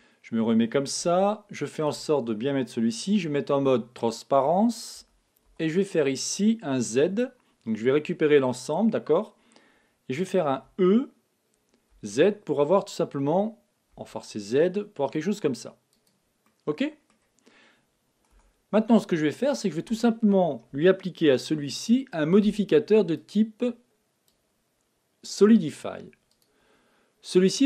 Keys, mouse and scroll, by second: 1.0-3.0 middle drag, 3.6 z, 4.9 a, 5.4 b, 10.6 e, 16.0-17.7 drag, 16.4-18.3 middle drag, 18.3 Tab, 21.5 n, 23.1-26.0 drag, 26.3-27.6 drag.